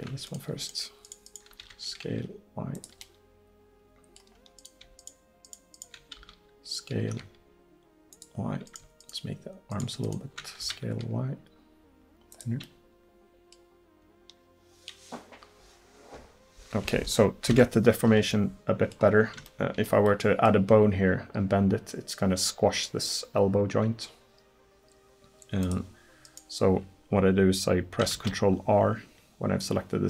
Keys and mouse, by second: 1.6 s, 5.0-7.6 drag, 6.2 s, 8.7-11.8 drag, 10.7 s, 12.7-15.6 middle drag, 17.5 KP_1, 25.7 click, 27.5 click, 28.2 ctrl+r.